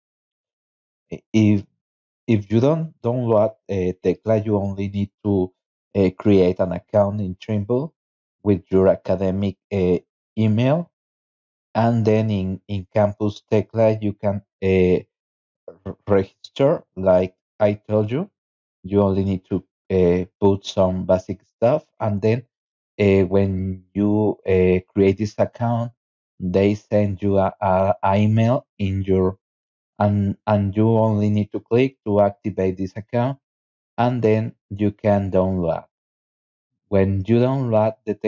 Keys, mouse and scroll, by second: 2.6 scroll down 2, 6.8 click, 7.8 scroll up 2, 11.4 click, 12.5 scroll up 2, 13.0-13.4 scroll down 3, 15.6 scroll down 1, 16.8 right click, 17.4 click, 18.0 click, 19.6 click, 30.5 click, 31.7 click, 32.5 scroll down 2, 33.4 scroll up 2.